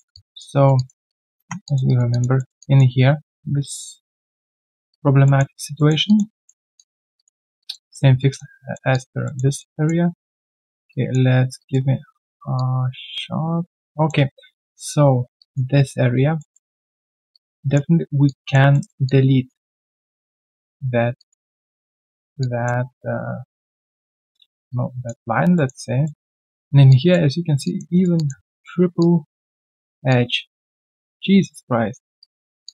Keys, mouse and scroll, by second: 0.1 alt+click, 0.5 alt+right click, 0.7 alt+click, 1.5 1, 1.6 alt+click, 1.8 alt+right click, 2.1 alt+click, 2.6 alt+click, 2.9-3.5 alt+scroll down 1, 3.6 ctrl+a, 5.2 alt+middle click, 5.5 alt+right click, 5.7 alt+middle click, 6.0 alt+click, 6.3 alt+middle click, 6.5 alt+scroll down 1, 6.7 alt+click, 8.6 alt+middle click, 8.9 alt+click, 9.2 alt+middle click, 9.5 alt+right click, 9.7 alt+click, 10.5 alt+middle click, 10.9 alt+click, 12.5 alt+click, 13.9 alt+middle click, 15.4 alt+click, 16.3 alt+middle click, 16.7 alt+click, 17.0 alt+middle click, 17.3 alt+click, 18.7 alt+middle click, 19.0 alt+click, 20.3 alt+click, 21.1 alt+click, 22.4 alt+click, 24.4 alt+middle click, 24.7 alt+click, 25.5 alt+middle click, 26.9 alt+click, 27.6 alt+click, 27.9 alt+right click, 28.1 alt+click, 28.4 alt+middle click, 29.0 alt+middle click, 30.1 alt+click, 30.8 alt+middle click, 31.1 alt+click, 32.2 right click.